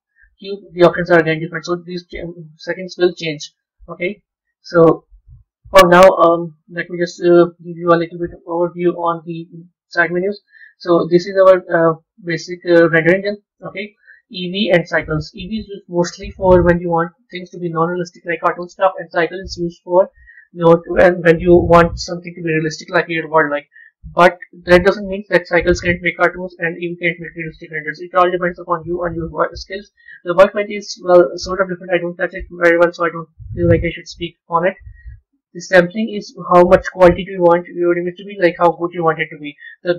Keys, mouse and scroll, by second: 4.4 a, 8.9 click, 10.5 click, 13.7-16.8 drag.